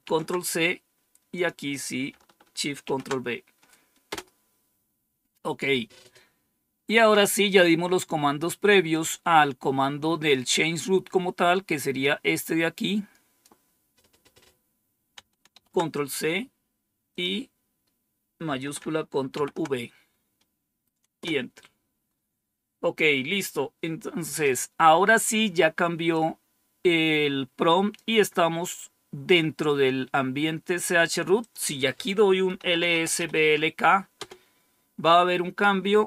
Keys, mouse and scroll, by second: 1.2 click, 2.8 ctrl+v, 4.0 Return, 6.2-7.2 scroll down 2, 8.8 click, 11.9-13.3 drag, 15.4 ctrl+c, 17.0 click, 19.2 ctrl+v, 21.1 Return, 26.0-27.9 drag, 31.3 click, 32.1-33.6 typing, 34.1 Return.